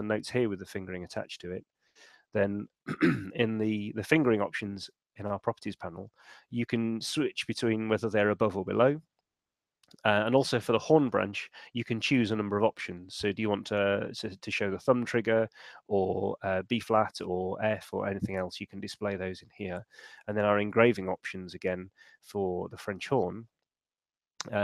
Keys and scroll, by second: 20.2 shift+super+e.